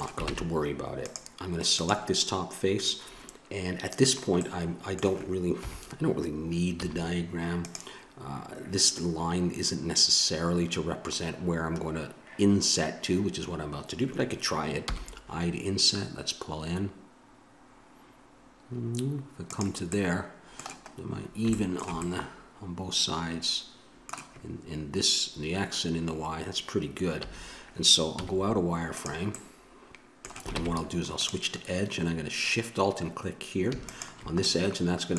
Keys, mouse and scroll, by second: 0.3 ctrl+Tab, 1.7-3.3 right drag, 4.3-5.7 middle drag, 5.6 KP_7, 6.8 z, 14.8 i, 19.9-22.1 middle drag, 27.2 a, 28.2 z, 29.3 middle click, 30.5 ctrl+Tab, 33.8 click, 34.4-35.1 middle drag.